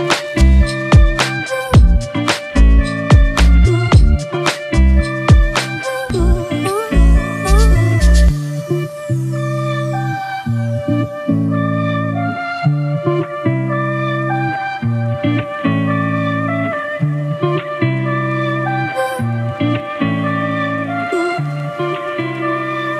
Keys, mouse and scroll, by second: 4.1 [, 4.3 [, 4.7 double click.